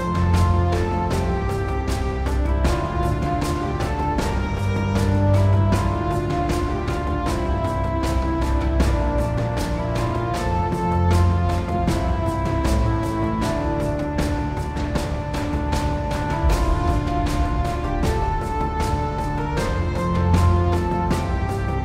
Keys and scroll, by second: 1.3 super+z, 3.5 super+z.